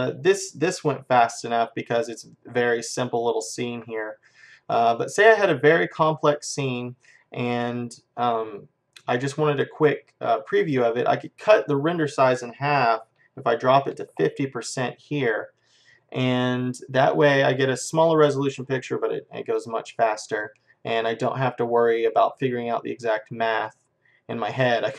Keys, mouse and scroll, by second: 3.9 middle click, 5.3-8.3 middle drag, 11.1-13.0 drag.